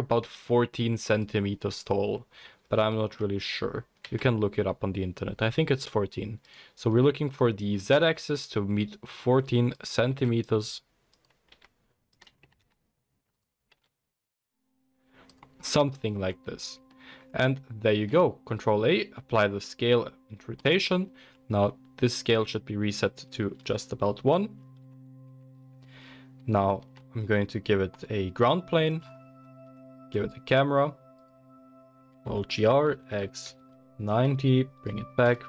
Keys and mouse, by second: 0.2-1.3 drag, 0.2 n, 1.3-2.8 middle drag, 4.0 s, 8.1 s, 10.0 s, 11.4 s, 12.4 g, 13.7 s, 15.8-17.9 shift+middle drag, 17.9 ctrl+a, 25.2 alt+g, 26.4 shift+click, 26.8 shift+a, 27.1-28.9 middle drag, 29.6 shift+a, 31.9 alt+g, 32.1 alt+r, 34.0 g, 35.2 KP_0, 35.3-35.4 middle drag.